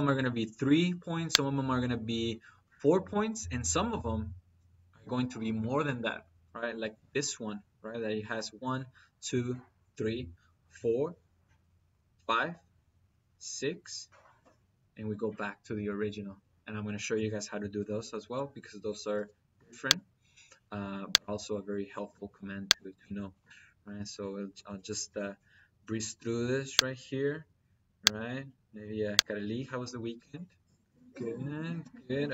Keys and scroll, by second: 19.0 -, 25.8 -, 31.6 -.